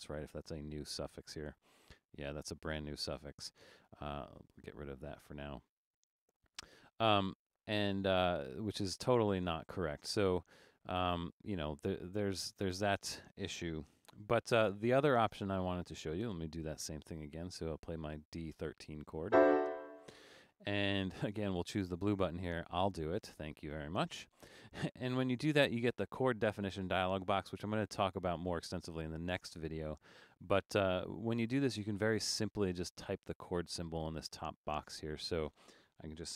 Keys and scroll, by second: 13.9 BackSpace.